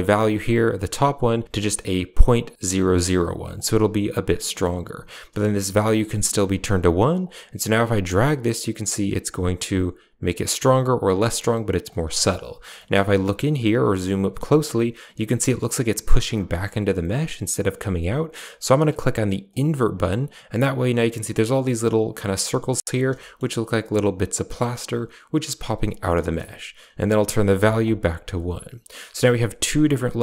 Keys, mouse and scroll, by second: 0.4-3.5 drag, 4.4 middle click, 7.1-11.8 shift+drag, 12.2 shift+middle click, 13.8 shift+middle click, 19.4 click, 26.8-27.7 drag, 29.6 click.